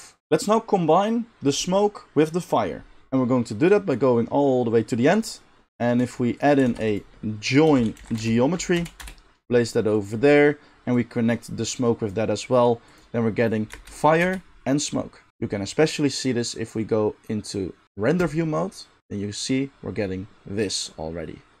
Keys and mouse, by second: 0.2-5.7 middle drag, 5.7 click, 6.0 g, 6.5-10.9 shift+middle drag, 6.7 shift+a, 10.9-18.4 drag, 13.7 space, 14.2 space, 18.4-21.6 middle drag.